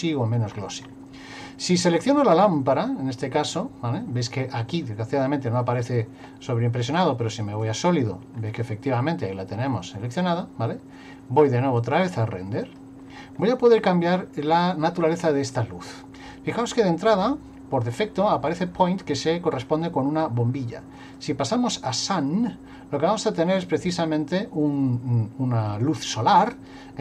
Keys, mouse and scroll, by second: 0.5-1.2 scroll up 7, 2.2 click, 7.0 click, 8.3 scroll up 1, 8.4-10.0 scroll down 1, 11.8 click, 21.0 click.